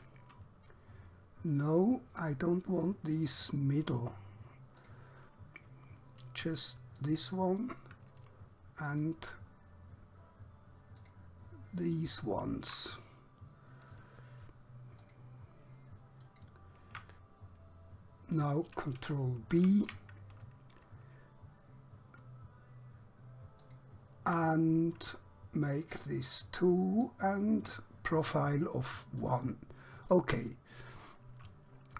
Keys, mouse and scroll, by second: 1.6 right click, 4.9 click, 7.1 alt+click, 9.0 alt+shift+click, 11.0 alt+shift+click, 12.0 alt+shift+middle click, 13.0 middle click, 15.0 alt+shift+click, 16.3 alt+shift+click, 17.2 middle click, 19.6 ctrl+b, 26.3 click, 31.0 middle click.